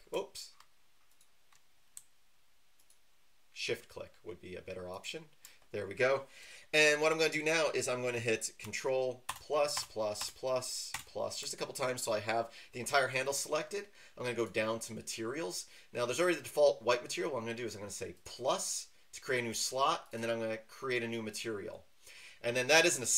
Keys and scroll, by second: 9.3 ctrl+KP_Add, 9.7 ctrl+KP_Add, 10.2 ctrl+KP_Add.